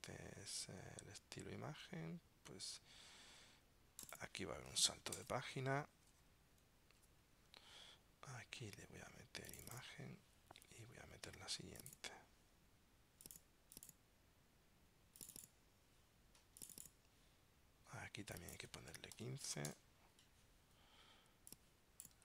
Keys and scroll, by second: 5.3 super+Return.